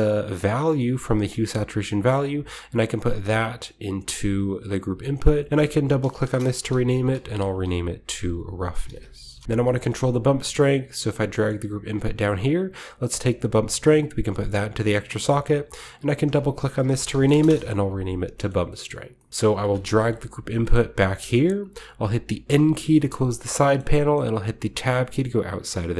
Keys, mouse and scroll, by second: 2.1-3.6 drag, 4.2 click, 5.4 click, 6.2-9.9 typing, 6.6 shift+click, 8.8 Left, 9.3 Return, 9.5-11.0 scroll down 1, 9.8 middle click, 11.0-12.8 drag, 11.5-13.5 scroll up 1, 13.5-17.6 drag, 13.5-14.3 scroll up 1, 16.7-17.2 typing, 17.4 Return, 18.3 middle click, 18.6-21.4 scroll down 1, 19.6-21.4 middle drag, 20.1 g, 21.5-22.9 drag, 22.0-25.5 typing, 23.0-23.5 middle drag, 23.1-24.6 scroll up 1, 23.7 middle click, 24.1-24.9 middle drag, 24.6 Tab, 24.6 scroll up 1, 25.8-25.9 drag.